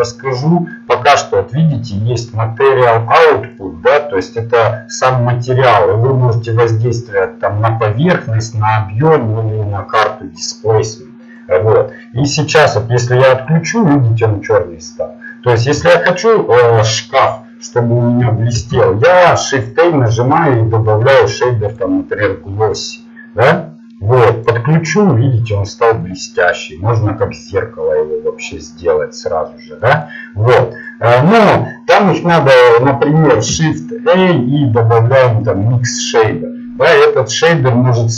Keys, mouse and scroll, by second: 4.2 click, 13.8-14.9 drag, 25.0-29.0 drag, 30.2-31.4 drag, 31.6 click.